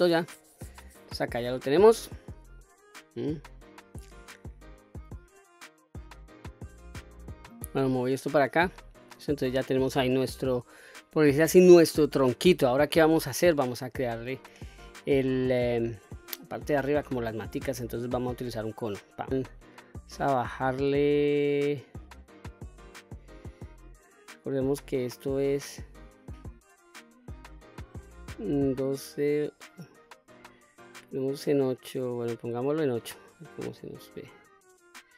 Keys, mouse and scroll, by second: 1.5 q, 2.1 middle click, 2.9 middle click, 7.5 middle click, 7.5-7.9 scroll down 1, 8.6 middle click, 9.8-10.3 middle drag, 10.4-11.4 scroll down 2, 11.4 scroll up 2, 12.5 middle click, 13.6 shift+a, 19.3 shift+a, 20.5-32.6 drag, 33.4-35.1 middle drag.